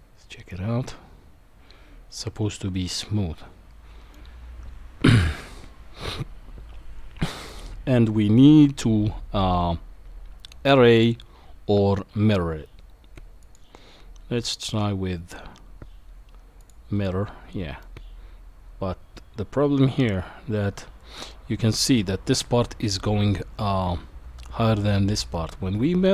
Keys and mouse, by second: 13.4-16.7 drag, 17.8-21.8 middle drag, 25.3-26.1 middle drag.